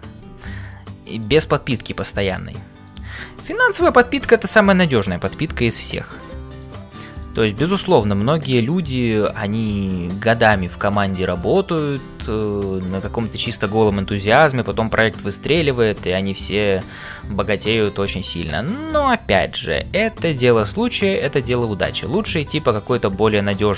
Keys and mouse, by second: 0.0-23.7 typing, 1.1 click, 2.9 click, 4.9 click, 7.1 click, 9.0 click, 11.4 click, 13.4 click, 18.0 middle click, 18.8 click, 19.6 click.